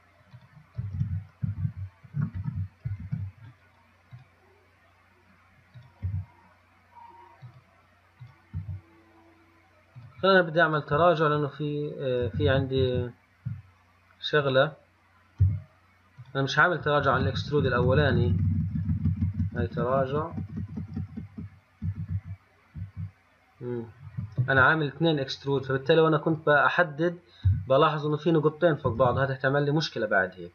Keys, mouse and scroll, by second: 1.2 ctrl+z, 1.8 ctrl+z, 3.3 ctrl+z, 4.4 click, 6.0 click, 6.3 g, 8.5 click, 8.8 g, 12.5 ctrl+z, 12.7 ctrl+z, 13.1 ctrl+z, 14.7 click, 15.7 g, 17.3 ctrl+z, 17.5 ctrl+z, 17.7 ctrl+z, 17.9-19.3 ctrl+z, 19.5 ctrl+z, 19.7 ctrl+z, 19.8 ctrl+z, 20.1 ctrl+z, 20.2 ctrl+z, 20.4 ctrl+z, 20.6 ctrl+z, 20.8 ctrl+z, 21.0 ctrl+z, 21.2 ctrl+z, 21.4 ctrl+z, 21.6 ctrl+z, 22.1 ctrl+z, 22.3 ctrl+z, 23.0 ctrl+z, 25.9 click, 26.6 click, 27.7 g, 29.2 ctrl+z.